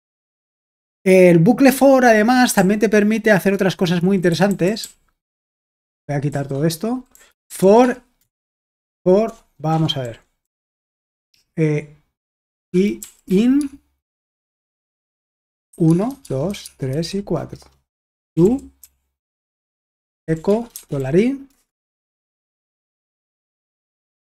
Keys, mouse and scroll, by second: 2.6-4.0 k, 4.3 k, 5.8-10.6 typing, 12.4-13.6 typing, 15.5-24.2 typing, 17.5 Return, 19.7 Return, 23.5 Escape.